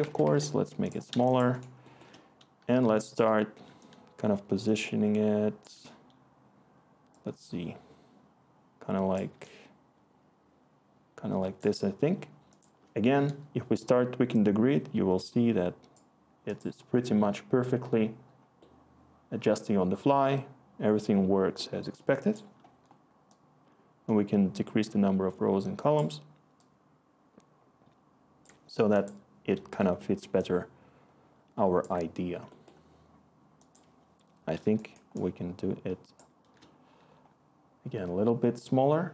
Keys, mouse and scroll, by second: 0.0 Tab, 0.2 Tab.